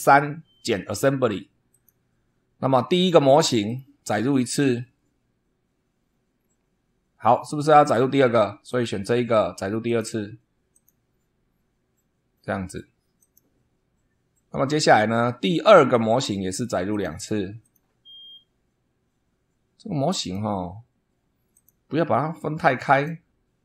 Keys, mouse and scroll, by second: 1.7 click, 2.9 click, 3.6 click, 6.3-6.8 scroll down 2, 8.6 click, 9.8 click, 10.7 click, 13.2 click, 15.6 click, 16.9 click, 17.6 click, 20.2 click, 21.5 click, 22.9 click.